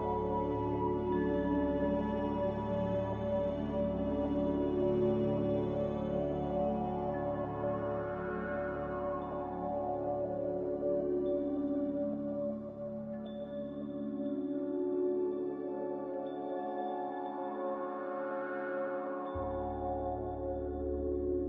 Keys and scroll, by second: 2.6 z, 6.6 Return, 12.6 z, 16.9 z, 17.6 c.